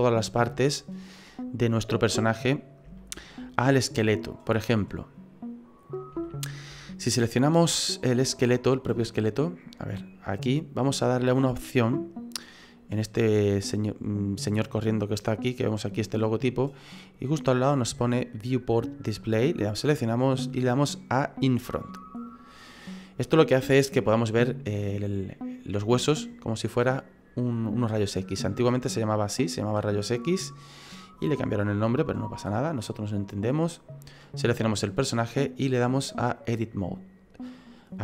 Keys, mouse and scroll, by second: 0.7 middle click, 3.0 shift+middle click, 4.8 middle click, 5.8-6.6 scroll up 4, 8.4 right click, 9.2 click, 10.3 right click, 10.7-11.5 scroll down 2, 12.3-13.3 scroll down 1, 13.8 click, 19.3 click, 22.3 click, 23.7 middle click, 24.4 middle click, 28.4 middle click, 29.9 middle click, 34.0 right click, 35.0 click, 37.5 middle click.